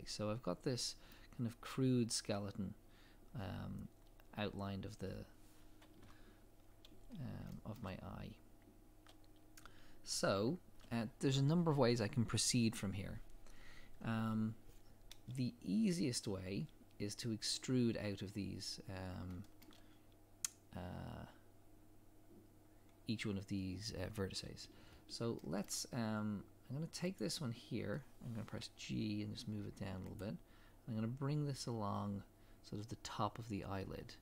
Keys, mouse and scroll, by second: 3.7 scroll up 1, 6.0 KP_3, 6.7 scroll down 1, 7.5 shift+middle click, 7.9 scroll up 1, 10.0 scroll down 1, 15.4 scroll up 1, 19.4 shift+middle click, 22.7 scroll down 1, 24.9-25.4 scroll up 1, 25.4 shift+middle click, 25.8 scroll up 1, 27.2 click, 28.6 g, 32.0 scroll down 1.